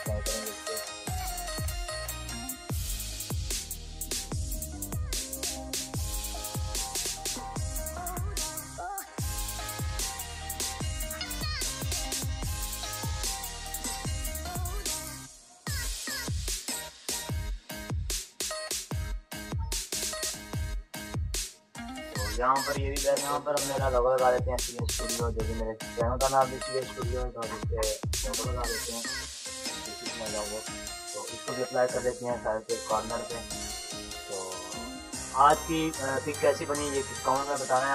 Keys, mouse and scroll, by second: 6.3 ctrl+=, 6.9 ctrl+-, 7.4 ctrl+=, 8.6 ctrl+=, 8.6 j, 11.5 click, 12.7 ctrl+j, 13.8 click, 14.9 v, 15.4 click, 15.4 click, 16.9 click, 18.0-19.3 drag, 19.3 ctrl+z, 20.0-23.1 drag, 23.5 click, 23.9 BackSpace, 25.0 click, 26.7 BackSpace, 29.7 click, 32.7 shift+Return, 34.0 ctrl+click, 36.8 ctrl+t, 37.6 shift+click, 37.7-37.9 shift+drag.